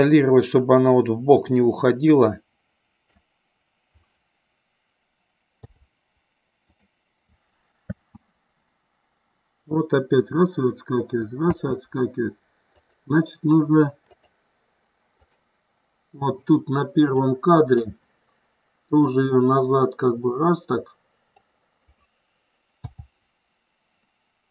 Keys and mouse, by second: 5.5 i, 7.9 space, 11.7 space, 12.9 click, 14.2 click, 15.3 click, 17.3 click, 19.2-21.4 drag, 22.9 i.